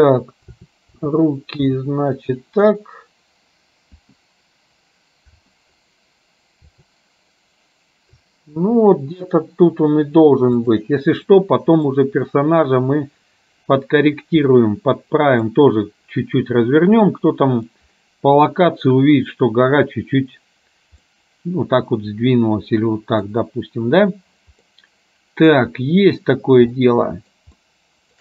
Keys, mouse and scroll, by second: 11.5 middle click, 14.6-15.6 middle drag, 17.2 middle click, 21.2-23.3 middle drag, 24.8 middle click, 27.0 shift+middle click, 27.7 shift+middle click.